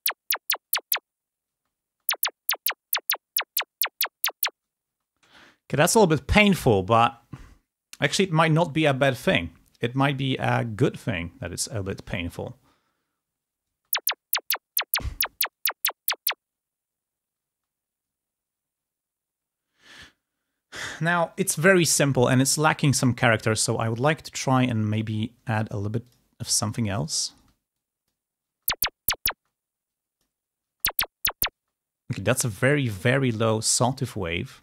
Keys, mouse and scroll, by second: 1.4 space, 4.8 space, 13.6 space, 17.6 space, 24.0 click, 25.4 click, 26.0 click, 26.3 click, 28.4 space, 29.3 space, 29.7 click, 30.6 space, 31.5 space, 33.9 click.